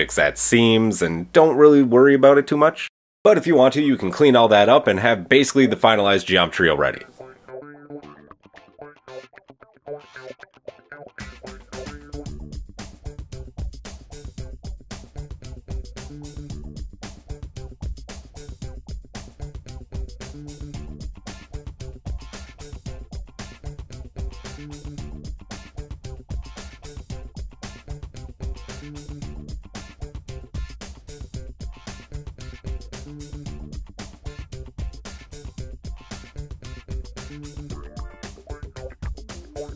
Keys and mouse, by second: 0.6-2.3 middle drag, 2.3 click, 2.6 shift+middle click, 4.8 g, 5.4 g, 6.4 middle click, 8.5-14.8 middle drag, 8.5 KP_1, 10.9 KP_3, 14.8 click, 15.0-17.8 middle drag, 17.8 click, 17.9-23.3 shift+middle drag, 19.3 g, 23.3-24.3 drag, 24.3 middle click, 26.0 g, 27.8-30.8 middle drag, 30.8 shift+click, 31.6 click, 31.9-32.5 shift+drag, 34.6 click, 35.8 g, 37.9 middle click.